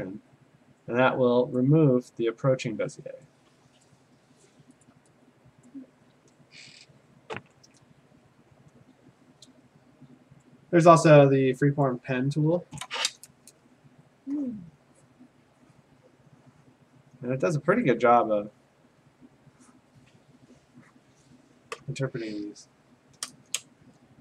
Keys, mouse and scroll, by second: 1.6 click, 3.9 click, 4.9 alt+click, 5.7 click, 8.5 Return, 11.8 click, 14.5 click, 15.1 click, 15.8 click, 16.7 click, 18.3 click, 19.8 click, 20.3 click, 21.0 click.